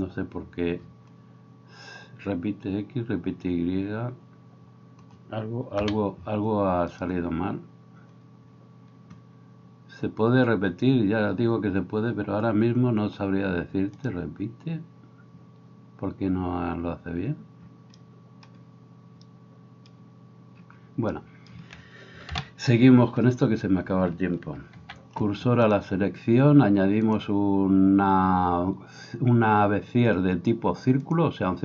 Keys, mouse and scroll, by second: 7.8-14.0 middle drag, 14.0-31.6 drag, 22.3 KP_7, 24.9 shift+s.